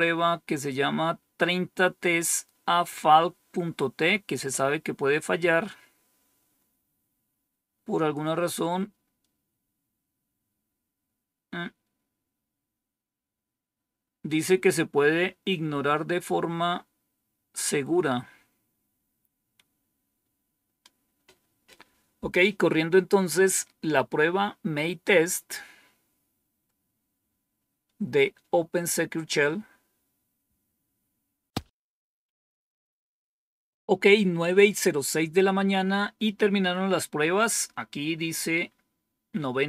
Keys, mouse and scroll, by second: 19.0-19.6 scroll down 1.